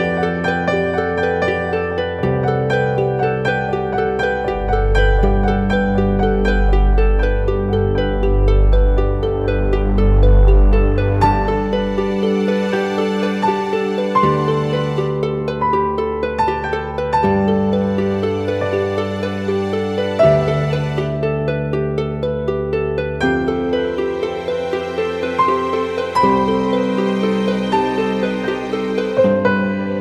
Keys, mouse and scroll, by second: 2.1-3.3 typing, 3.3 double click, 4.4-4.7 typing, 5.0 double click, 17.6 ctrl+=, 18.3 scroll down 1, 19.9 scroll up 1, 20.5 alt+click, 26.5 ctrl+t, 27.9 alt+shift+click.